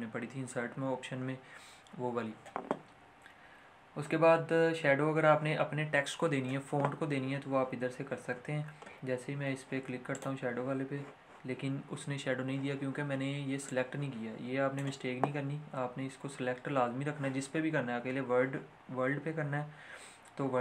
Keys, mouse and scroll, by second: 8.8-10.0 scroll down 1, 10.2 click, 13.6-17.1 drag.